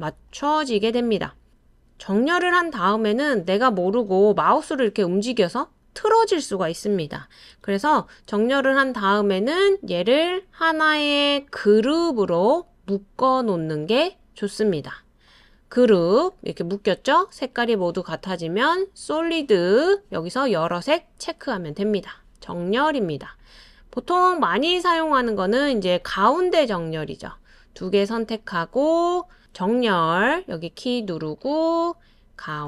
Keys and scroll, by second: 7.6 super+z.